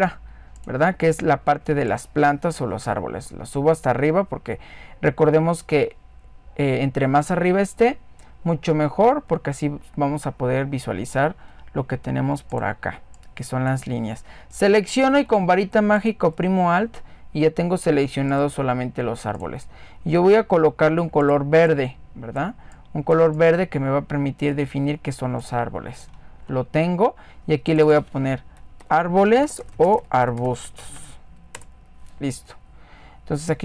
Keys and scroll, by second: 30.6-33.6 typing.